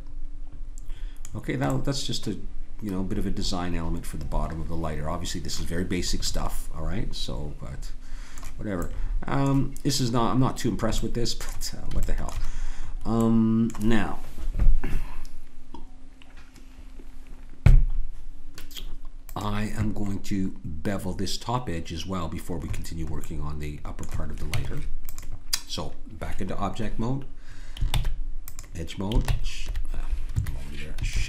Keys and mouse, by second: 1.9-3.5 middle drag, 5.8-8.1 middle drag, 8.9-15.8 middle drag, 19.3-21.2 drag, 23.2-24.5 drag, 24.5 Tab, 27.9 ctrl+Tab, 29.3 ctrl+Tab.